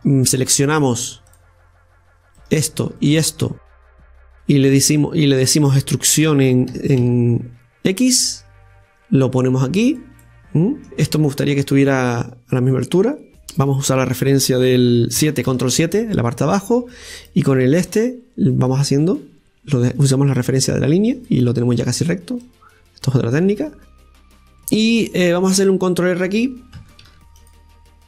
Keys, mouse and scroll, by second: 0.0-1.3 right drag, 1.3-2.4 drag, 2.4 right click, 3.3 scroll down 2, 3.9-6.2 middle drag, 6.2 e, 10.2 middle click, 10.9 scroll up 2, 11.3 middle click, 12.2-13.4 right drag, 13.4-15.2 middle drag, 15.2 KP_7, 17.2 click, 17.9-21.0 drag, 22.4-23.9 drag, 23.9-27.0 middle drag.